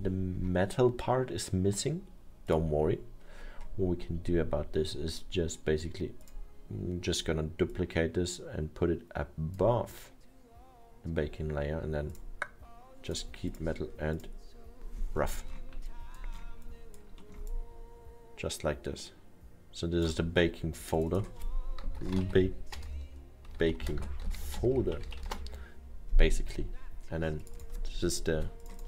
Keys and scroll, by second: 21.8-25.6 typing.